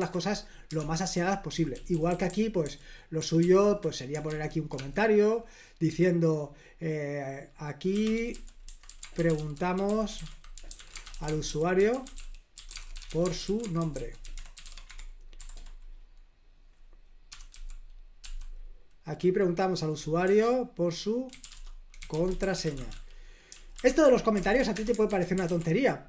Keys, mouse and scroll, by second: 0.7 super+l, 0.9-5.2 typing, 7.6-15.8 typing, 17.0-18.7 typing, 20.2-24.9 typing, 24.0 Escape, 25.0 super+h.